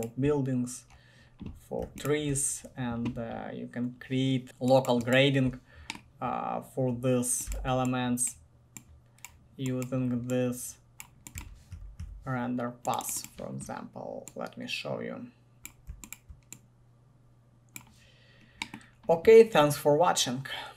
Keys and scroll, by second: 7.7 c, 11.3-12.7 typing.